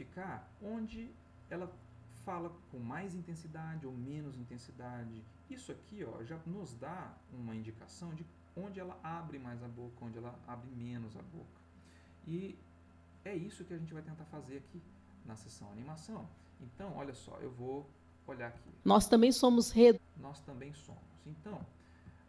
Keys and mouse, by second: 13.1 click, 15.2 click, 17.1-18.2 drag, 18.5 space, 21.1-22.2 ctrl+middle drag.